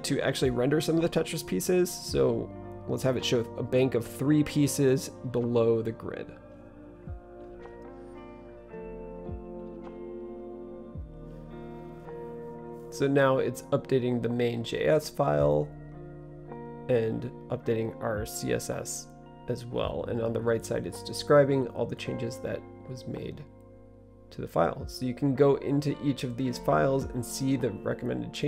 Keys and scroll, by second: 0.4-10.2 typing.